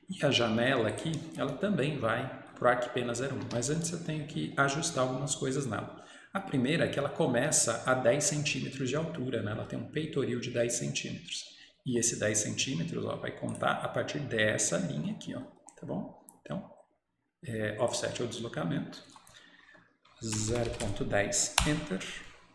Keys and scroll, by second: 3.4 Escape, 3.6 Escape, 21.6 Return, 21.6 typing.